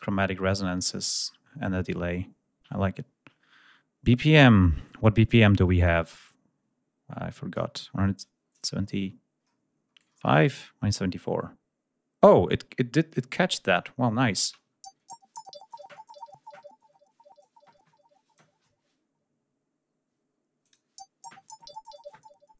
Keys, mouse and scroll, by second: 8.0 click, 8.6-10.0 ctrl+scroll down 4, 13.3 scroll down 2, 13.8 scroll up 2, 14.2 ctrl+space, 14.5 ctrl+scroll up 1, 17.2-18.4 drag, 20.4 click.